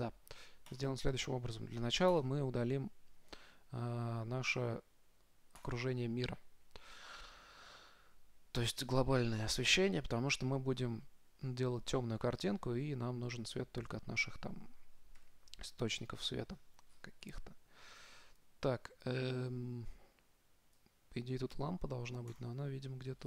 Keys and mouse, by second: 1.0-4.2 drag, 10.4-12.9 middle drag, 15.4 KP_7, 16.4-18.9 middle drag, 21.0-23.2 drag.